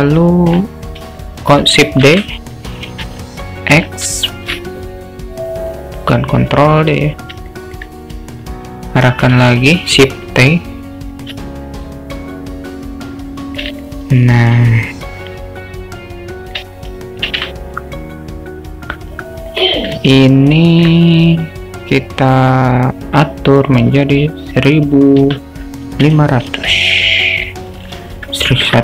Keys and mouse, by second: 2.2 shift+d, 7.6 alt+middle click, 9.5 shift+t, 11.6-13.6 alt+middle drag, 13.8-14.3 alt+shift+middle drag, 15.3-16.6 drag, 17.5 shift+t, 20.2-20.9 alt+middle drag, 23.6-28.8 drag, 26.7 0, 28.4 BackSpace.